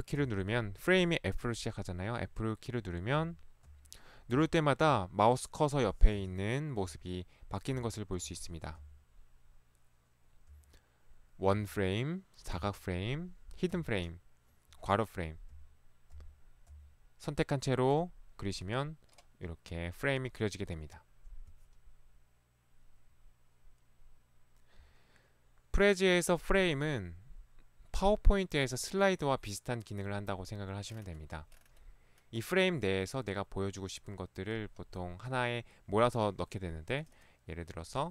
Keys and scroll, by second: 0.3 f, 3.2 f, 3.7 f, 4.4 f, 6.3 f, 6.9 f, 7.8 f, 8.9 f, 10.6 f, 11.6 f, 12.6 f, 13.8 f, 15.5 f, 16.2 f, 16.7 f.